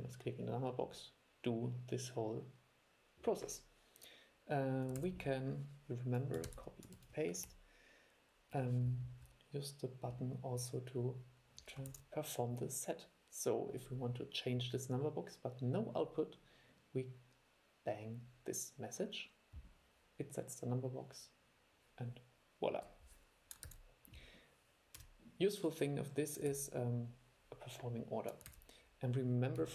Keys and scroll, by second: 5.1 super+e, 6.7 super+c, 7.1 super+v, 12.0 super+e, 23.8 super+e, 26.7 super+e, 28.7 super+e.